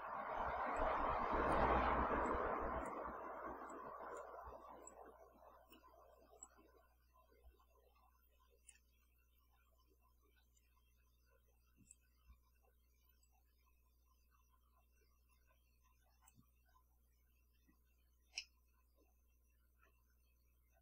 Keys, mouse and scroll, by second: 0.7 click, 2.3-3.1 drag, 3.7-4.4 drag, 4.9-5.9 drag, 6.4-8.9 drag, 10.6-12.1 drag, 13.2-16.5 drag, 18.4-20.0 middle drag.